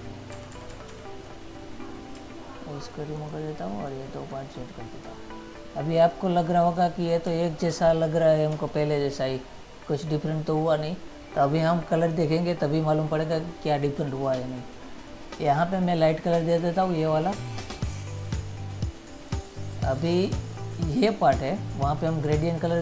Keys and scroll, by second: 0.6 ctrl+-, 1.2 ctrl+-, 8.0 ctrl+-, 8.8 ctrl++.